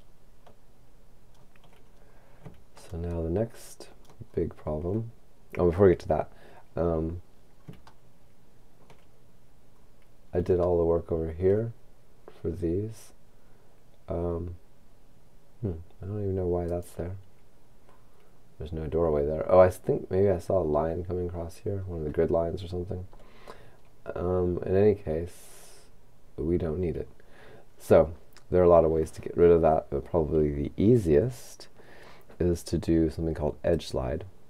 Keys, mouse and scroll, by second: 0.4-1.9 shift+middle drag, 1.9-2.9 shift+scroll down 1, 2.9 middle click, 7.0-8.0 scroll up 3, 8.0 shift+middle click, 9.8-10.7 shift+scroll up 4, 10.7 shift+middle click, 16.6 right click, 21.3-22.2 scroll down 2, 22.2-23.2 scroll down 1, 23.2-24.7 scroll up 1, 24.7 scroll up 1, 25.4-26.7 scroll down 2, 27.1-28.2 scroll up 1, 33.8 click.